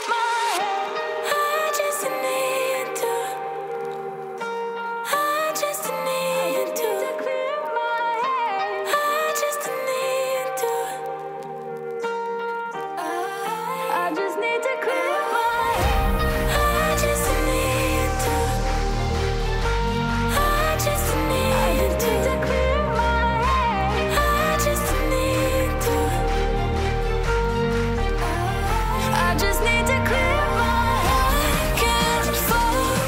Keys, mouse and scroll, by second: 7.4-11.5 ctrl+drag, 11.5 Return, 15.7 shift+w, 23.4 alt+Return, 24.2 ctrl+shift+[, 25.8 ctrl+u.